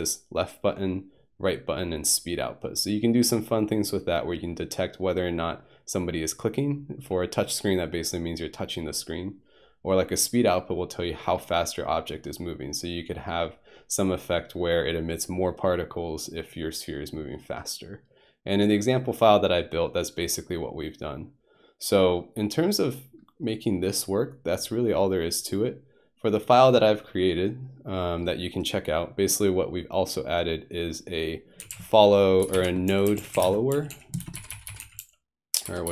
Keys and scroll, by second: 31.6-34.5 typing.